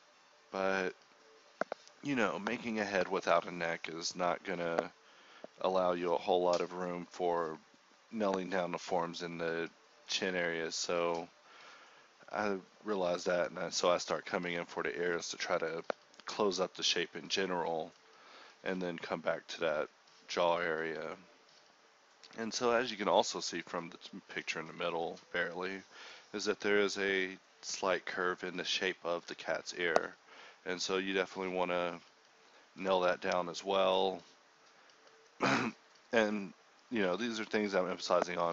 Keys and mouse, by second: 0.0-0.3 typing, 0.6 click, 1.2 ctrl+r, 1.6 g, 1.9 click, 2.3 click, 2.6 g, 2.9 click, 3.2 g, 3.4 click, 4.1 KP_7, 4.8 Tab, 5.0 middle click, 5.6 g, 6.3 middle click, 6.4 g, 7.3 middle click, 7.4 g, 7.7-8.8 middle drag, 10.2 ctrl+z, 11.1-15.9 typing, 15.6 ctrl+r, 17.7 middle click, 18.1 g, 18.9 Tab, 19.3 middle click, 19.4 Tab, 20.9 g, 21.2 right click, 21.9 middle click, 22.4 g, 22.8 right click, 23.3 g, 23.7 g, 24.6 ctrl+Tab, 25.3 a, 25.4 ctrl+r, 26.1 ctrl+Tab, 26.7 middle click, 27.1-30.6 typing, 27.7 ctrl+Tab, 28.1 click, 28.4 click, 28.5 ctrl+Tab, 29.4 alt+m, 31.6 f, 31.9 ctrl+z, 32.6 f, 32.8 z, 33.7 f, 34.3 ctrl+z, 34.4 ctrl+z, 34.4 ctrl+r, 35.1 k, 35.7 click, 36.5 g, 36.8 click, 37.4 f, 38.1 f.